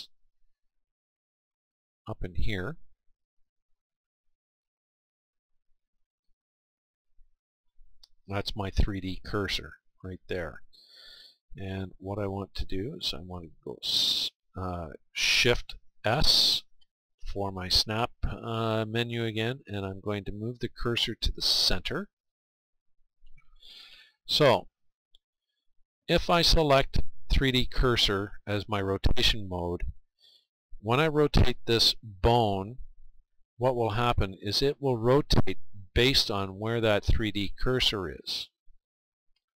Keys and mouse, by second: 6.7-19.5 drag, 24.7-27.6 drag, 32.8 r, 38.1-39.5 right drag.